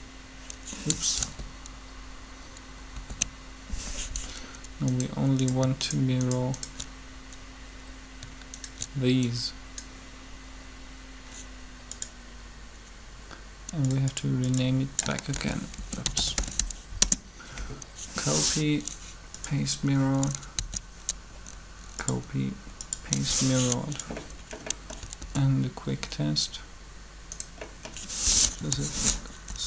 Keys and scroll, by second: 1.2 ctrl+z, 1.9 ctrl+z, 2.9 ctrl+z, 15.0-16.7 typing, 16.7 Return, 20.1 Up, 20.6 Up, 25.2 alt+a, 28.3 typing, 29.5 Up.